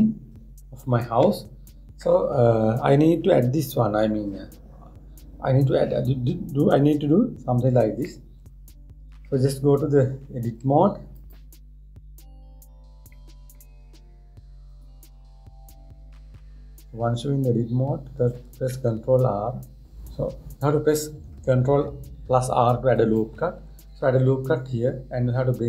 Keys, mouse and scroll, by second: 0.3-3.4 middle drag, 4.3 scroll up 1, 4.3 scroll down 1, 4.4 scroll up 1, 4.6-5.1 scroll down 2, 5.1 scroll up 1, 5.3-7.5 scroll down 1, 8.7-9.9 middle drag, 9.9-11.1 scroll up 1, 11.1 Tab, 11.8 click, 13.8-15.4 middle drag, 15.4 click, 16.6 scroll down 1, 16.7-18.2 scroll up 5, 18.2-19.2 scroll up 1, 19.4 ctrl+r.